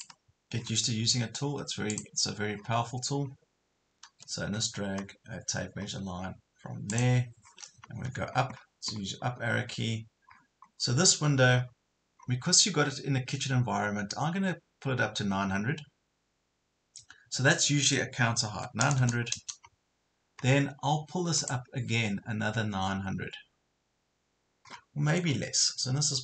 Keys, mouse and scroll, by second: 0.6 scroll up 1, 1.9 click, 2.6 scroll down 1, 4.1 Escape, 5.8 scroll up 1, 6.9 click, 7.5-8.1 scroll down 1, 8.1-8.6 scroll up 1, 8.6 scroll down 1, 9.2 scroll up 1, 10.3 scroll down 1, 11.1 scroll up 1, 11.5 scroll down 1, 12.2 scroll up 1, 18.5 KP_9, 20.1 scroll up 1, 21.4 click, 24.7 scroll down 1, 25.3 scroll up 1.